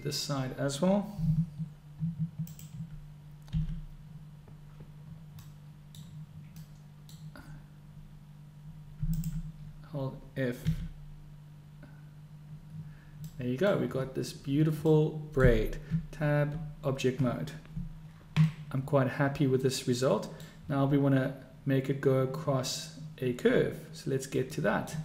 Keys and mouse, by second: 2.5 alt+click, 4.7 f, 5.4 middle click, 6.6 middle click, 9.0 alt+click, 12.2 f, 13.3 click, 14.9 click, 14.9 middle click, 14.9 right click, 15.3 click, 15.3 right click, 15.9 Tab, 18.5-19.4 middle drag, 19.4 click, 19.5-20.4 middle drag, 20.4 click, 20.4 right click, 24.6 click, 24.6 right click.